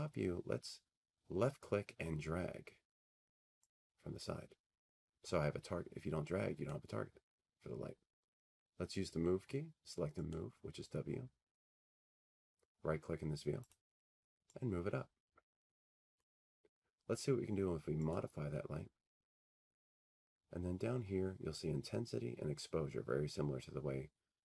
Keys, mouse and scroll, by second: 6.7 click, 8.8 click, 10.3-12.5 drag, 16.2-24.4 drag.